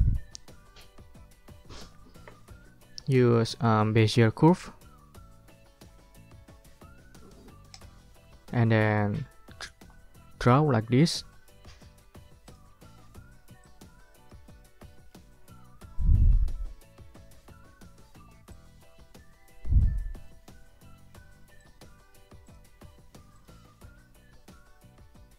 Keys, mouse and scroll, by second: 7.7 click, 8.1 ctrl+click, 8.7 ctrl+scroll up 2, 8.9 ctrl+click, 10.6 ctrl+scroll up 2, 12.4 click, 13.6 click, 14.9 click, 15.5 ctrl+scroll down 2, 18.5-20.4 drag, 21.6 click, 22.4 click, 23.3 ctrl+click, 23.6-24.3 ctrl+scroll up 2, 24.3 ctrl+scroll down 2.